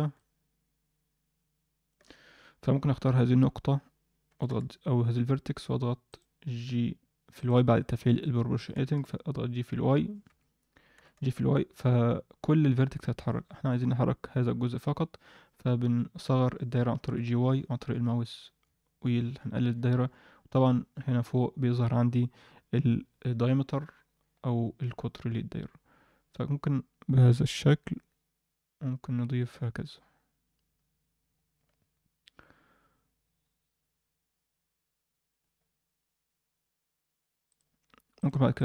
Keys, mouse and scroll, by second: 0.2-1.9 drag, 1.8 d, 1.9 d, 4.2 g, 6.1 click, 7.3 click, 8.7 g, 10.9 g, 38.1 click, 38.5 click.